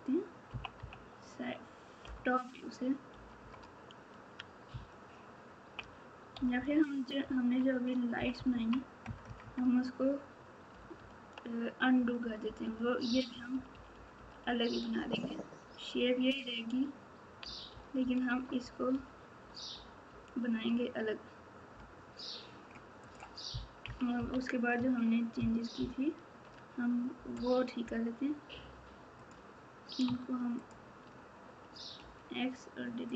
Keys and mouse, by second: 0.5 KP_2, 0.7 KP_1, 6.3 KP_Subtract, 7.2 KP_3, 10.9 ctrl+z, 12.4-20.8 ctrl+z, 23.0 click, 23.8 KP_6, 24.1 KP_8, 25.7 ctrl+KP_2, 29.1 click.